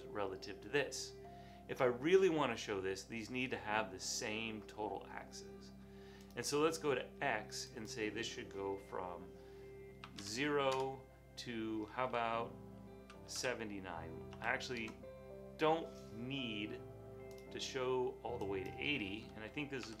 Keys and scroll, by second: 10.2 Tab, 10.8 Tab, 13.1-14.4 typing, 14.8 Return, 17.9 typing, 19.9 typing.